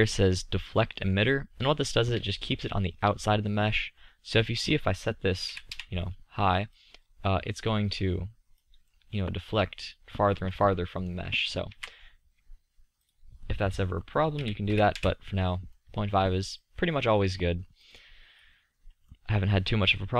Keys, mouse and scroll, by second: 5.9 click, 6.3 click, 8.7 drag, 12.0 ctrl+z, 15.1 middle click, 18.0-20.1 drag.